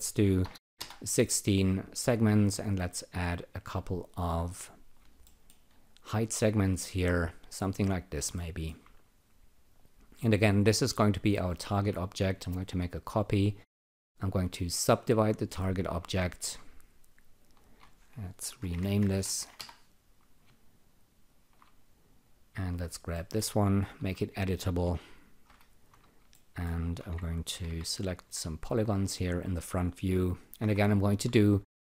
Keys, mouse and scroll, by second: 0.4 BackSpace, 0.5 1, 0.8 Return, 3.6 click, 3.8 double click, 4.4 click, 5.2 alt+middle click, 5.7 alt+right click, 6.1 click, 8.4 alt+middle click, 10.5 click, 12.1 ctrl+click, 14.8 alt+click, 17.3 click, 17.6 double click, 18.3-19.9 typing, 21.3 alt+shift+click, 23.1 alt+middle click, 23.9 c, 25.4 F4, 26.3 alt+middle click, 26.9 Tab, 27.3-28.1 typing, 28.5 click, 30.6 F1, 31.6 alt+click.